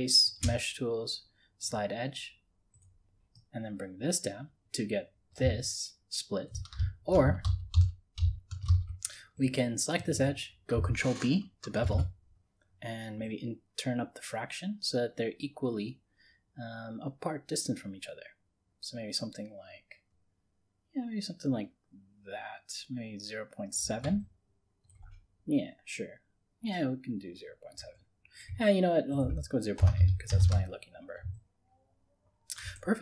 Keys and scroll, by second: 7.5 ctrl+z, 11.8 ctrl+b.